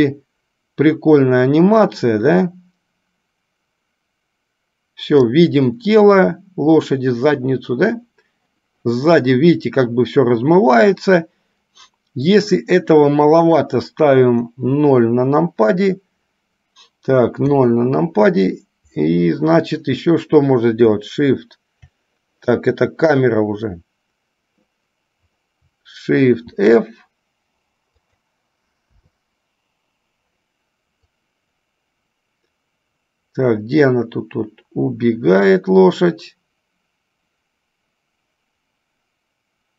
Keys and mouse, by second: 12.5 click, 31.3-39.7 drag.